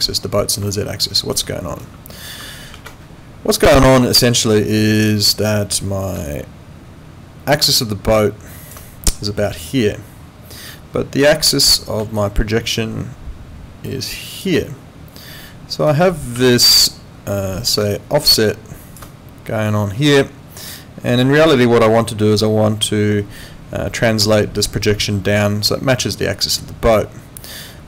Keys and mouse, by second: 0.7 alt+click, 2.7 ctrl+2.